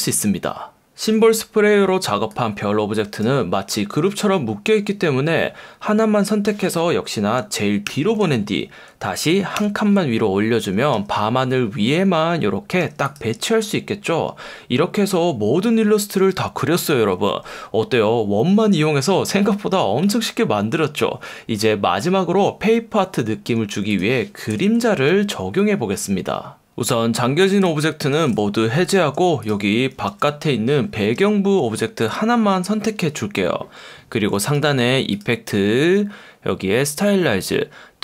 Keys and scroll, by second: 3.8 super+z, 7.9 shift+super+[, 9.6 super+], 11.0 F1, 12.8 F1, 24.5 super+-, 28.1 alt+super+2, 30.1 F1, 31.1 F1.